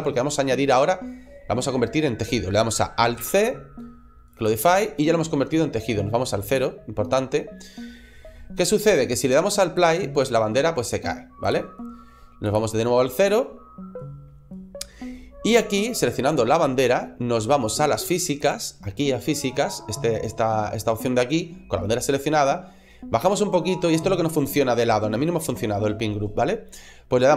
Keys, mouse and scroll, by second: 3.0 alt+c, 6.3 click, 9.6 click, 11.3 click, 12.3 click, 18.2 right click, 18.2 click, 22.6-24.9 scroll down 2, 24.9-26.5 scroll down 2.